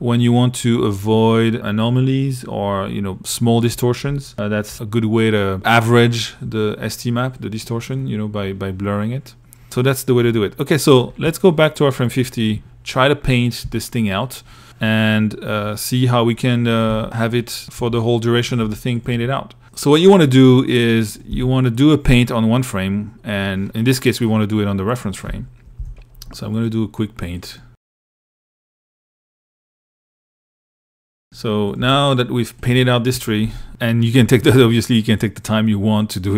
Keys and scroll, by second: 14.8 1, 16.1-18.4 typing, 20.5 i, 25.0 p, 26.8 i, 30.2 super+z, 31.0-33.7 typing.